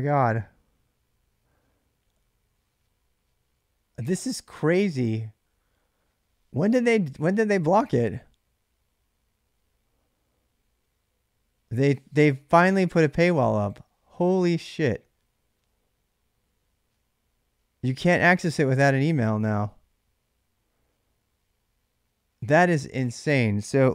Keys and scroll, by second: 23.7 ctrl+c.